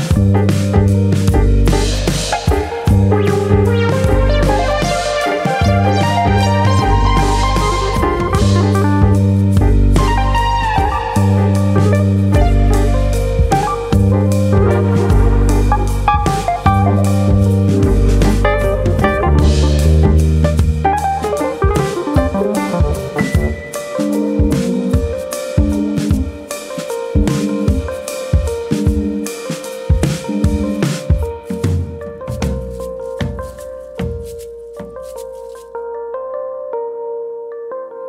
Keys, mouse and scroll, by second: 0.6 click, 1.8 scroll down 2, 2.6 middle click, 2.6 scroll down 1, 2.8 middle click, 4.9 3, 5.0 click, 6.0 KP_1, 6.9 alt+click, 8.0 click, 9.2 ctrl+KP_Add, 9.4 ctrl+KP_Add, 10.2 ctrl+KP_Add, 11.8 click, 13.3 ctrl+KP_Add, 14.2 click, 15.4 click, 17.0 ctrl+KP_Subtract, 19.2 ctrl+KP_Subtract, 19.2 click, 20.6-21.0 scroll down 3, 21.0 middle click, 21.8-23.0 scroll up 1, 23.1 scroll up 1, 23.7 click, 24.0 middle click, 24.4 shift+middle click, 24.8-25.3 scroll up 4, 25.3 shift+middle click, 26.8 i, 28.0 i, 28.0 click, 28.2 middle click, 28.6 shift+middle click, 29.2 s, 29.9 right click, 30.2 middle click, 31.1 e, 32.0 click, 33.2 e, 34.9 click, 35.1 middle click, 35.5 middle click, 36.4 middle click, 36.4-36.8 scroll up 3, 36.6 middle click, 37.0 shift+middle click, 37.4 shift+middle click, 37.5 click.